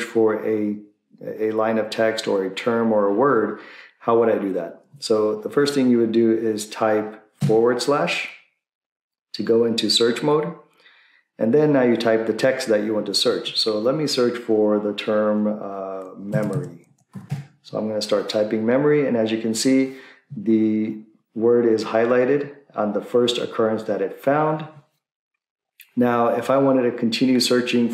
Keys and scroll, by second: 7.5 /, 16.2-17.7 typing.